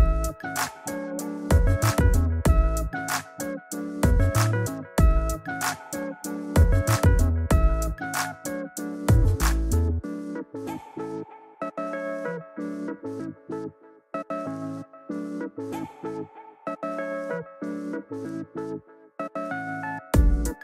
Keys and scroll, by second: 2.0 shift+Up, 7.5 shift+Left, 8.3 shift+Left, 10.3 shift+Return, 10.9 Return.